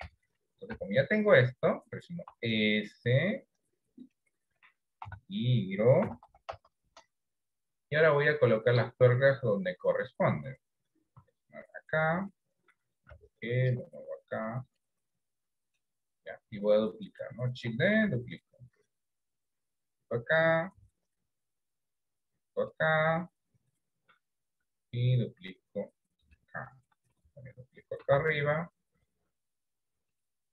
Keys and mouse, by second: 0.2 KP_1, 0.9 KP_3, 2.4 s, 5.1 r, 8.8 middle click, 11.3 s, 13.2 g, 18.2 shift+d, 20.9 shift+d, 24.6 shift+d, 28.1 shift+d.